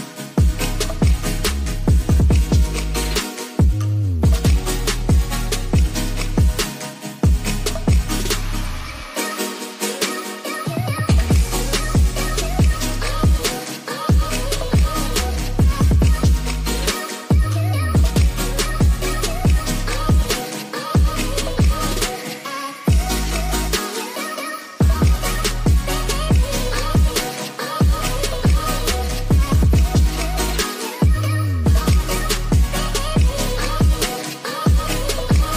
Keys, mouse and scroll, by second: 0.0 click, 1.4 middle click, 2.5 middle click, 4.4-5.6 drag, 8.9-11.1 drag, 14.8-16.0 drag, 17.5 ctrl+s, 17.8 middle click, 18.4 middle click, 20.0-20.7 middle drag, 21.2 click, 22.6 shift+d, 24.2-24.8 drag, 25.6 middle drag, 27.0 click, 33.0 click, 33.3-34.4 drag, 35.1 ctrl+z.